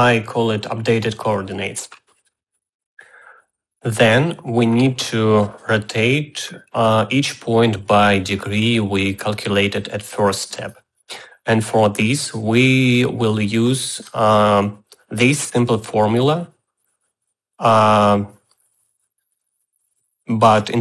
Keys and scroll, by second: 0.0-0.8 typing.